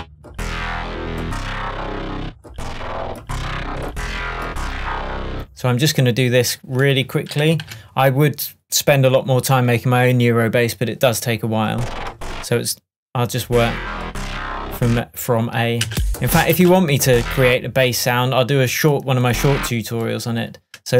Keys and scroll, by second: 7.7 shift+super+m, 15.9 space.